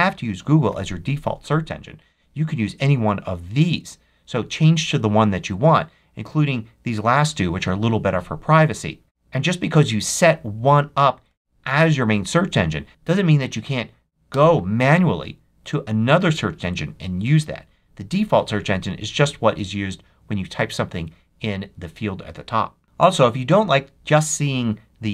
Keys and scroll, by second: 12.9 m, 14.2 Return.